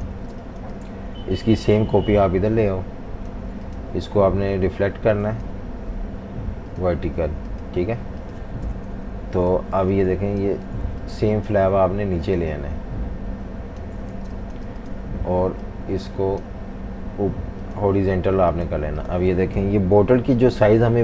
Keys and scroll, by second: 0.0-0.3 typing, 8.9 super+-, 9.1 super+-, 9.8-11.1 typing, 14.1 v, 14.3 space, 19.6 super+-, 19.8 super+-, 19.9 super+-, 20.7-21.0 typing.